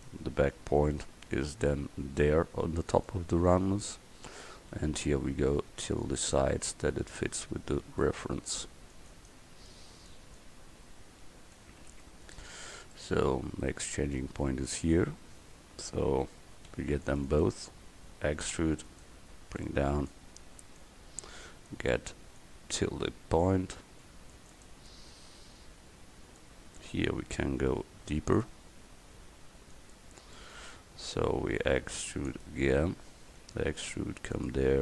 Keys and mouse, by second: 1.1 g, 5.5 a, 5.8 c, 6.7-8.4 drag, 8.3 a, 8.6 c, 16.7 c, 18.6 e, 19.6-20.9 drag, 23.5 a, 24.0 c, 27.5 g, 30.4 click, 31.7 c, 33.4 e.